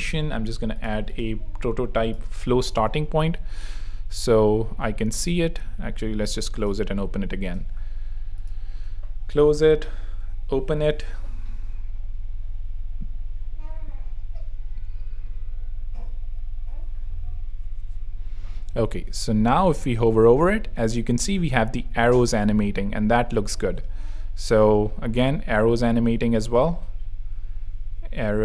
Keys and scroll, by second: 2.8 super+3, 3.3 super+r, 5.3 super+w, 6.1 super+v.